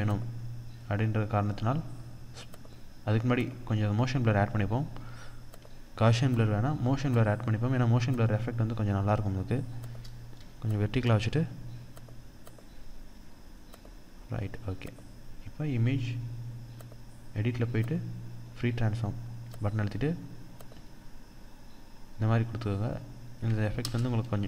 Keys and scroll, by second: 0.2 ctrl+d, 23.5 Return.